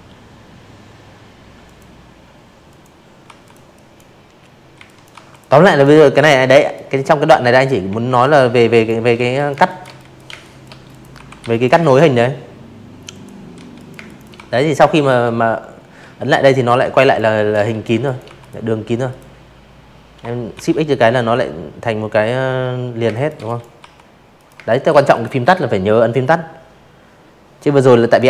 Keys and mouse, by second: 0.2 v, 0.4 click, 0.7 drag, 1.7 z, 1.8 click, 2.1 v, 2.2 click, 2.5 drag, 3.1 Delete, 3.5 drag, 4.2 z, 4.8 a, 5.7 click, 6.1-8.9 typing, 6.3 click, 6.6 click, 6.9 click, 7.3 click, 7.8 click, 8.5 click, 8.8 click, 10.1 click, 10.5 z, 10.7 click, 10.9 space, 11.0 click, 11.3 v, 11.8 space, 11.9 click, 13.8-15.2 typing, 13.9 click, 14.3 click, 14.6 click, 15.0 click, 15.3 click, 16.0 click, 17.5 shift+x, 20.0-21.8 typing, 20.1 click, 20.4 click, 21.3 click, 21.7 click, 22.1 click.